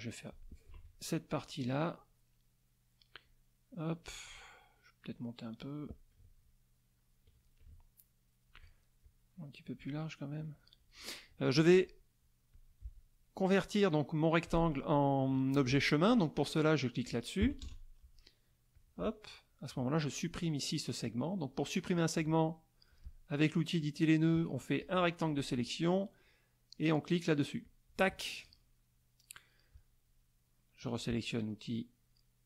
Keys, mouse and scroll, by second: 0.7 F1, 3.2 click, 5.1-6.1 drag, 6.4-8.7 ctrl+drag, 9.0 shift+click, 10.4 click, 12.5 click, 15.5 click, 17.4 KP_Subtract, 17.8 KP_Add, 18.7 click, 19.8 click, 20.8 click, 21.9-23.1 drag, 23.8 click, 24.8 click, 27.6 click, 30.8 click.